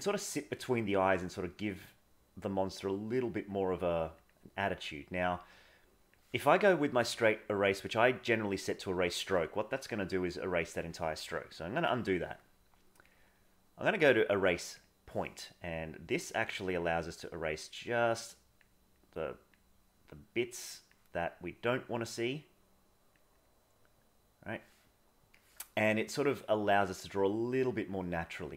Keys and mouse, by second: 0.7 click, 1.1 click, 1.6 click, 2.1 click, 3.3 click, 3.6 click, 3.8 click, 4.2 click, 4.7 click, 5.8 click, 10.0 click, 11.5 ctrl+z, 13.1-14.9 drag, 15.7-18.6 drag, 19.0 click, 19.9-20.9 drag, 22.4 click, 23.4-24.5 drag, 26.3-27.5 drag, 27.7 click, 28.2 click.